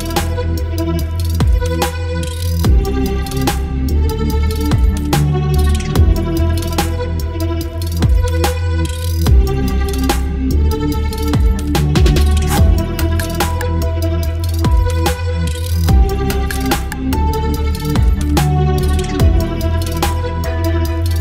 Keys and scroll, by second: 1.2 ctrl+BackSpace, 1.4 ctrl+d, 1.6 space, 2.5 v, 3.0 v, 4.5 space, 6.9 ctrl+j, 7.7 space, 8.2 ctrl+j, 8.4 ctrl+t, 9.4 space, 12.1 Return, 13.8 space, 15.4 space, 18.3 space, 19.0 v, 20.1 Delete, 20.8 space.